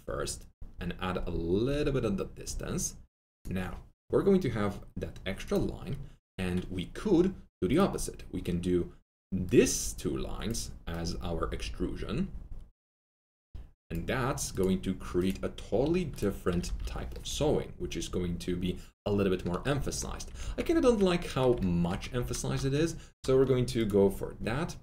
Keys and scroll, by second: 16.4 F3, 16.6 F3, 16.7 F4, 20.4 ctrl+alt+z, 22.1 ctrl+alt+z.